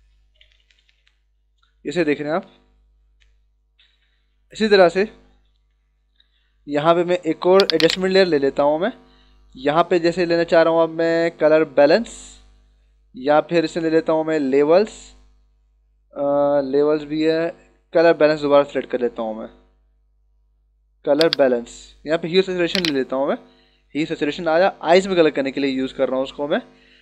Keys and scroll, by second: 0.2 ctrl+-, 3.7 ctrl+=.